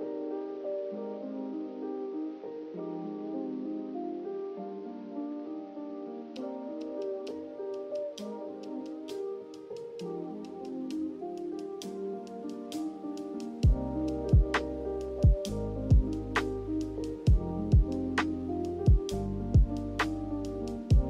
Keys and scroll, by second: 6.3 ctrl+z, 10.4 ctrl+h.